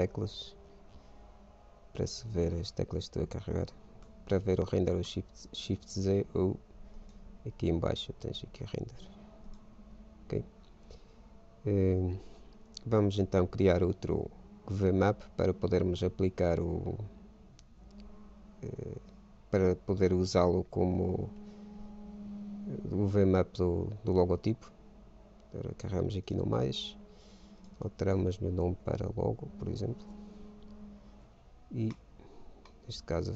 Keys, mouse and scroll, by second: 1.9 n, 4.2 shift+z, 7.4-9.3 drag, 13.9-15.1 drag, 26.5-30.1 drag, 31.6 Tab, 32.2 middle click, 32.6-33.3 drag.